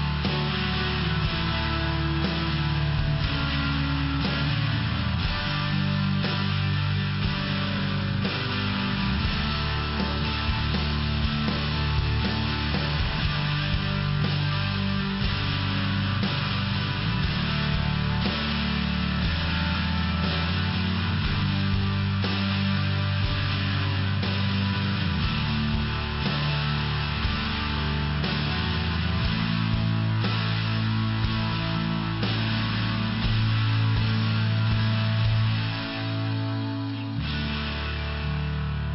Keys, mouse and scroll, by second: 1.0 click, 1.7 click, 2.9 click, 5.6 click, 7.1 click, 8.9 click, 9.7 click, 11.4 click, 12.1 click, 13.3 click, 14.0 click, 14.6 click, 16.3 click, 18.1 click, 19.0 click, 22.1 click, 23.2 click, 24.7 click, 25.6 click, 26.5 click, 27.5 click, 28.7 click, 29.5 click, 30.7 click, 33.3 click, 35.1 click, 36.6 click, 38.0 click.